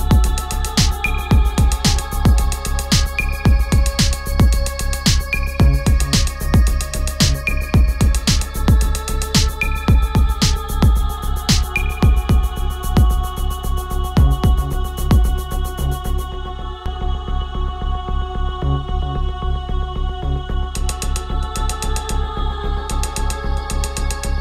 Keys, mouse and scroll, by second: 1.8-6.1 drag, 7.1 click, 7.3 right click, 8.0 click, 15.0 click, 15.7 ctrl+a, 19.0-24.4 drag.